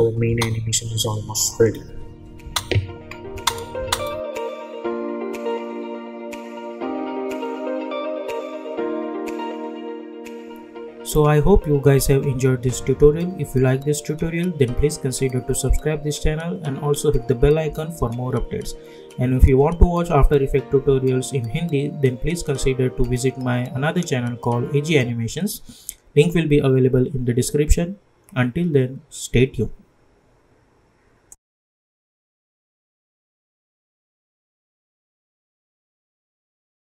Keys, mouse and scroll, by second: 2.4 space.